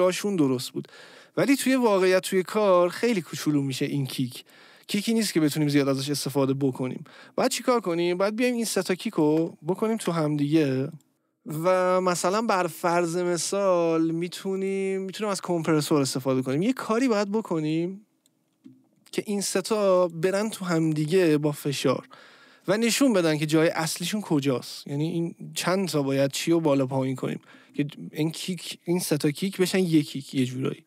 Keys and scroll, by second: 10.0 ctrl+g.